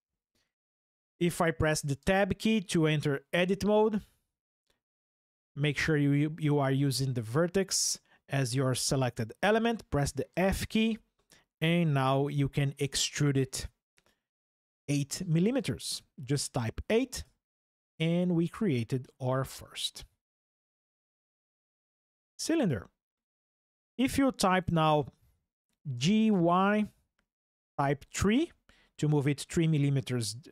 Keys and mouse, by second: 1.8 Tab, 3.6 click, 10.1 f, 12.6 e, 14.7 KP_8, 17.0 KP_Enter, 19.1 Tab, 19.9 click, 25.7 g, 26.1 y, 28.2 KP_3.